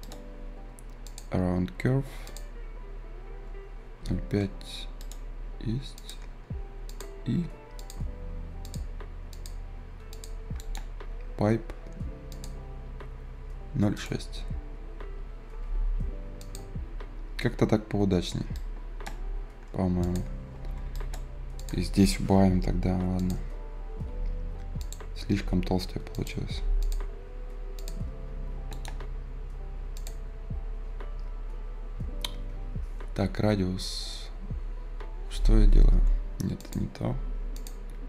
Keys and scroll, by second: 25.8 Delete, 37.2 Escape.